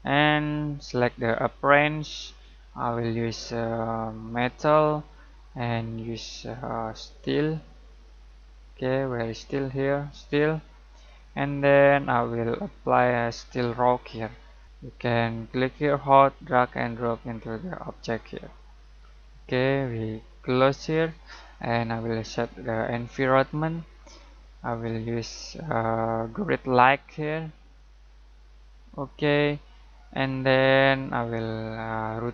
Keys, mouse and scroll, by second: 1.4 click, 4.3 click, 4.6-5.3 typing, 7.5-20.9 drag, 7.5 typing, 10.1 typing, 15.5 typing, 27.1-30.9 drag.